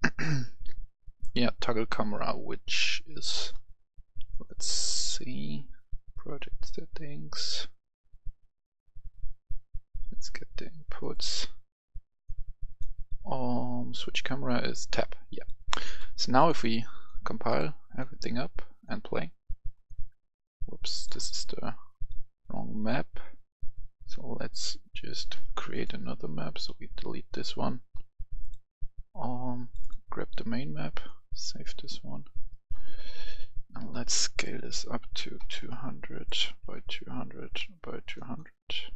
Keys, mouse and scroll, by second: 1.6 scroll up 1, 3.3 right click, 4.3-23.8 drag, 26.7 Delete, 28.4-30.8 drag, 32.5 right click, 32.8 scroll down 1, 34.3 click, 35.4 KP_2, 35.6 KP_0, 36.6 click, 36.6 KP_2, 37.0 KP_0, 37.4 click, 37.6 KP_2, 37.8 KP_0, 38.2 Return, 38.7-38.9 right drag.